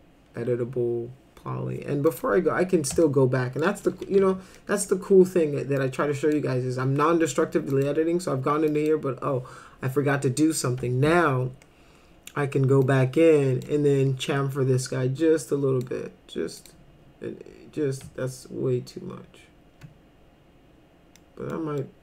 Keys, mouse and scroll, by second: 2.1 click, 3.0 alt+middle click, 3.8-4.7 typing, 4.5 middle drag, 5.8 click, 7.7 click, 8.7 click, 12.8 click, 14.9-15.8 drag, 16.6 click, 21.2 middle click, 21.8 middle click.